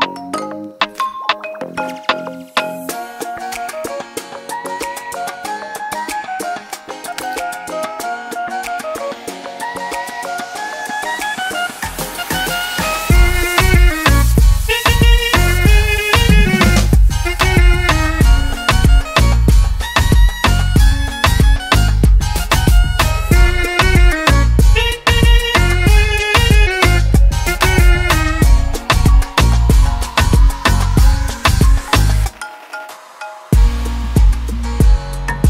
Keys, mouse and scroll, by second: 0.0 click, 2.4 4, 3.9 click, 4.3 4, 5.2 Return, 6.9 ctrl+d, 8.1 click, 10.0 click, 10.5 5, 10.8 Return, 12.4 click, 12.9 5, 13.2 Return, 15.0 ctrl+d, 17.0 click, 17.6 6, 17.9 Return, 19.4 Return, 19.5 click, 19.9 6, 20.2 Return, 22.0 ctrl+d, 23.6 click, 24.4 7, 25.9 click, 26.5 7, 27.2 Return, 29.1 ctrl+d, 30.2 click, 33.8 click.